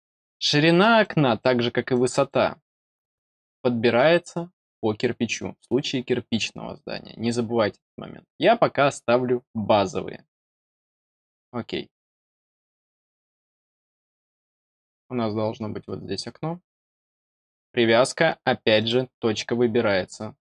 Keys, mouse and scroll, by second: 0.9 click, 1.8 click, 11.1 click, 12.2 middle click, 13.0 scroll down 1, 13.8 middle click, 14.6-14.9 scroll up 2, 18.7 click.